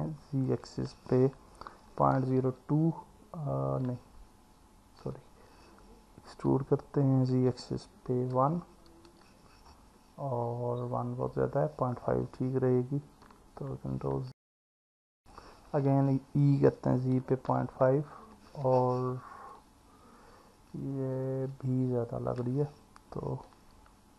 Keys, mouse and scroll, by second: 0.5 z, 1.9 KP_Decimal, 2.2 KP_0, 5.0 Escape, 6.3 e, 7.3 z, 8.3 KP_1, 9.1 KP_Enter, 14.3 ctrl+z, 15.9 e, 16.6 z, 17.2 KP_Decimal, 17.5 KP_5, 18.1 KP_Enter, 19.6-22.4 alt+middle drag, 23.7 Escape.